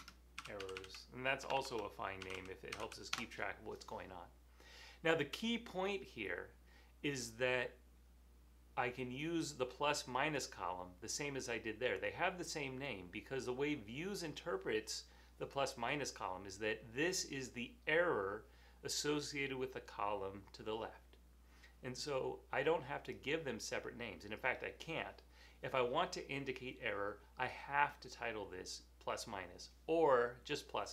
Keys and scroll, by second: 0.0-3.2 typing, 5.9-6.7 typing.